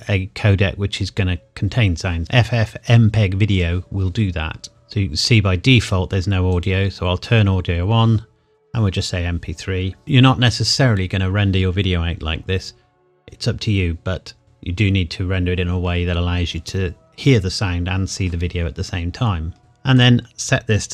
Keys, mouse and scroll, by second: 3.5 click, 4.7-5.3 scroll down 1, 6.5 click, 9.0 click, 15.8 scroll up 1, 20.0 click.